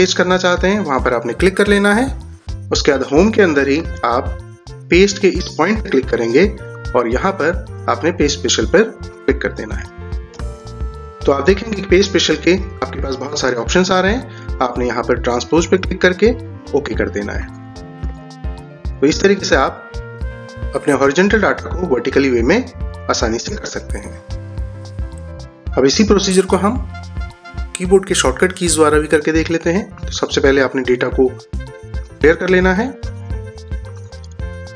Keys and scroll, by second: 3.8 ctrl+z, 18.2 ctrl+z.